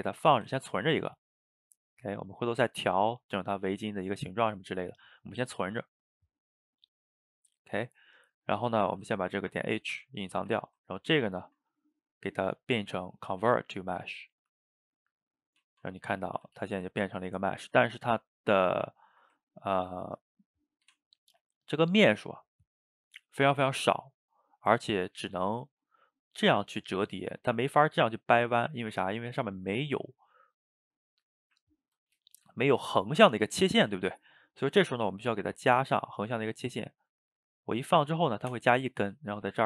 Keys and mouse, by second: 0.3 g, 1.5-2.0 middle drag, 2.0 drag, 2.3 click, 3.1-6.1 middle drag, 10.4-11.0 ctrl+shift+middle drag, 11.0 click, 11.3-12.2 shift+middle drag, 12.2-15.1 drag, 15.3 drag, 15.6 Tab, 16.2 a, 16.4 a, 16.7 shift+right click, 16.9-18.0 ctrl+middle drag, 18.0 ctrl+right click, 18.2-19.7 ctrl+middle drag, 19.7 ctrl+r, 21.4-35.3 middle drag, 35.5 ctrl+r.